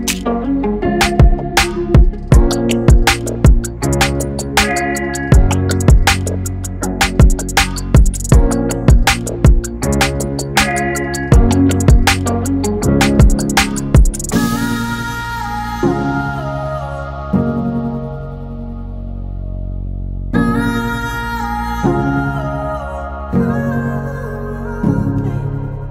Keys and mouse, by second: 6.8 Tab, 7.7 shift+Tab, 8.6 Tab, 9.8 shift+Tab, 12.3 click, 16.6 click, 20.2-25.9 drag.